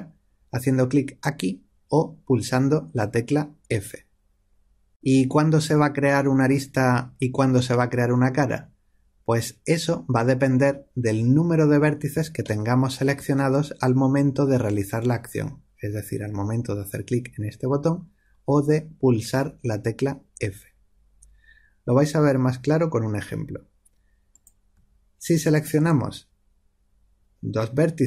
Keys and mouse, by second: 12.4-22.6 middle drag, 24.2-27.3 drag.